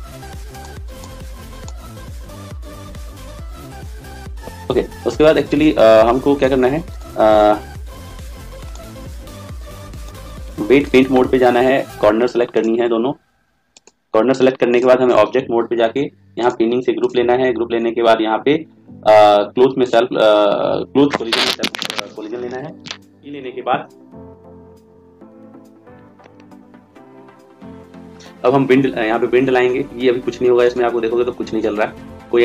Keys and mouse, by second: 0.5 click, 6.8 right click, 10.8 click, 15.1 click, 16.3 click, 30.5 click.